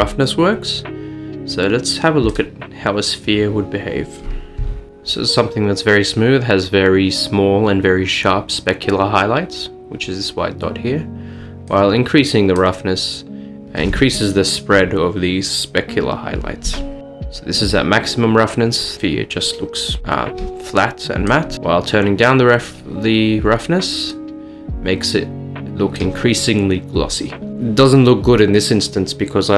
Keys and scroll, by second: 0.7 a.